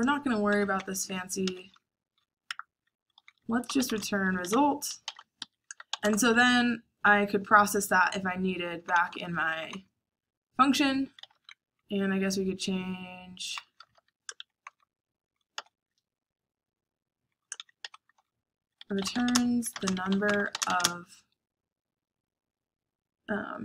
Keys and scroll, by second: 0.0-5.7 typing, 7.4-9.6 typing, 11.0-16.0 typing, 17.0-20.8 typing, 22.5-23.6 typing.